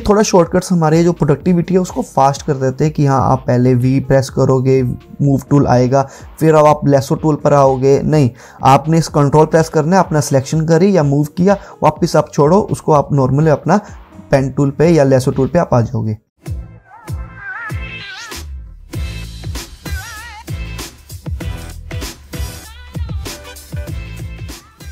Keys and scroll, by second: 4.1 v, 6.9 i.